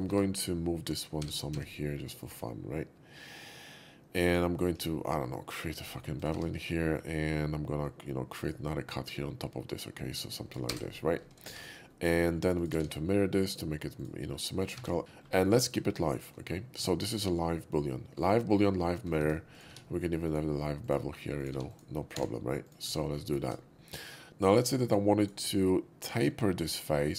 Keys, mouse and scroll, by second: 0.1 Tab, 0.4 click, 1.1 g, 1.5 x, 2.2 click, 4.3 click, 4.8 ctrl+b, 5.5 ctrl+b, 5.5 middle click, 5.5-5.8 scroll up 3, 5.6 middle click, 5.8 middle click, 6.2 click, 6.3 Tab, 6.7 middle drag, 7.7-8.4 drag, 9.1-10.5 drag, 10.7 space, 11.4 shift+2, 11.7-12.2 middle drag, 12.5 click, 12.7 alt+x, 13.5 click, 14.0 click, 14.3 middle click, 14.6 click, 14.8 q, 15.5 middle click, 16.1 shift+middle click, 16.8 Tab, 17.3 middle click, 19.5 click, 19.7 q, 20.2 Tab, 20.2 click, 20.9 click, 21.4 click, 21.7 click, 22.2 1, 22.7 click, 22.9 q, 23.3 click, 24.3 Tab, 24.7 shift+middle click, 25.2 shift+click, 26.3 s.